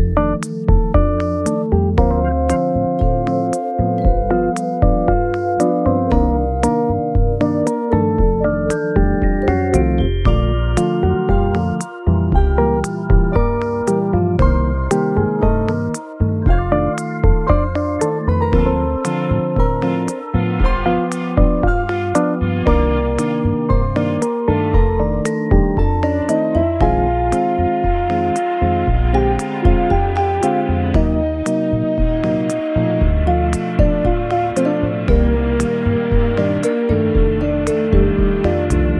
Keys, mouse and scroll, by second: 0.6 middle click, 2.1 shift+middle click, 2.6 shift+middle click, 5.0 shift+click, 5.1 middle click, 5.3-6.0 scroll down 1, 6.0 g, 6.7 scroll down 3, 7.4 scroll down 1, 10.5-12.0 scroll up 9, 13.4 scroll down 1, 13.6 middle click, 14.9 shift+middle click, 15.0-16.1 scroll up 2, 18.2 r, 23.6 e, 26.4 e, 28.0-28.3 scroll down 2, 28.4 middle click, 29.8-30.4 scroll up 1, 30.8 w, 30.8 g, 32.1 middle click, 35.2 alt+z, 35.6 alt+middle click, 36.7 shift+scroll up 1, 36.8 shift+middle click, 37.7 alt+z.